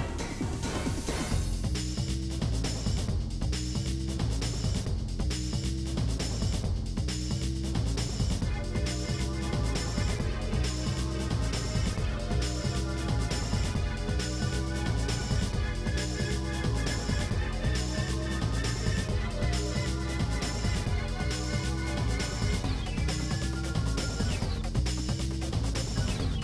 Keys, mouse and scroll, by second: 0.0 Left, 0.3 alt+click, 1.0 g, 1.8 middle click, 2.5 g, 3.2 ctrl+b, 6.6 3, 6.6 click, 7.5 ctrl+b, 8.7 middle click, 10.7 Tab, 11.3-12.0 scroll up 5, 12.1 click, 12.8 Tab, 13.0 Tab, 13.2 click, 13.4 Delete, 14.2 ctrl+z, 15.1 Delete, 15.6 click, 15.7 Delete, 16.3 click, 16.8 l, 17.1 middle click, 18.0 shift+d, 19.7 KP_7, 20.0 click, 20.1 shift+middle click, 20.5 shift+scroll up 2, 20.7 shift+middle click, 21.1 g, 21.9 scroll down 7, 22.2 shift+middle click, 22.9 click, 23.2 l, 23.8 l, 23.9-24.5 scroll up 2, 24.0 shift+middle click, 24.5 ctrl+d, 25.2 shift+d, 26.1 ctrl+z, 26.2 ctrl+z.